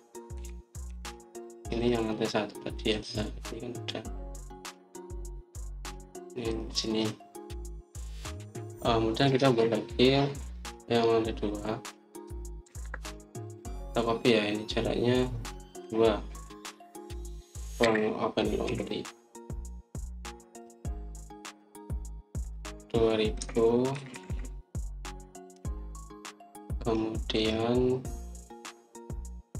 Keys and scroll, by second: 1.2-1.8 typing, 13.5 Escape, 13.7 Escape, 18.7-19.6 typing, 24.0-24.8 typing, 26.4 Return.